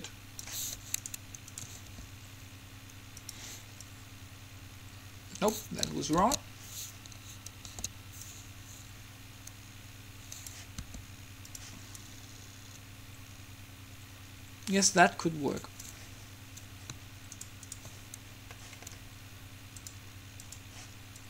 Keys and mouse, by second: 1.2-3.6 right drag, 2.1 r, 4.1-5.9 drag, 6.4 ctrl+z, 8.1 ctrl+z, 8.3-10.3 drag, 10.9 r, 12.2-14.0 drag, 17.5-19.6 right drag, 19.6 middle click, 20.0-21.2 drag.